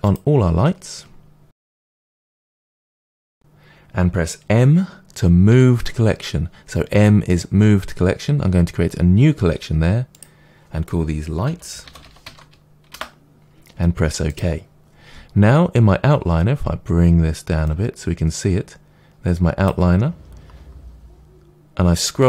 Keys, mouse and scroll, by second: 0.0 click, 1.4 shift+click, 1.9-2.2 shift+drag, 2.2-2.5 scroll up 2, 2.5-3.2 shift+drag, 3.2-5.4 scroll down 1, 5.4 m, 17.6-22.2 drag, 20.1-22.2 scroll up 1.